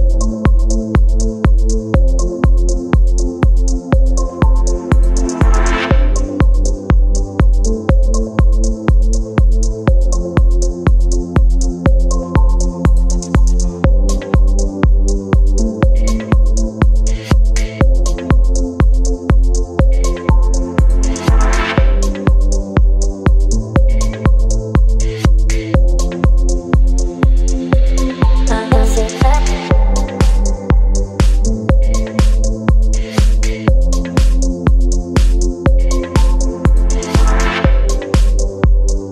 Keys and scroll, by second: 4.8 space, 6.9 Right, 8.0 space, 10.1 ctrl+t, 13.1 Return, 13.9 space, 17.5 space, 26.6 space, 36.6 space.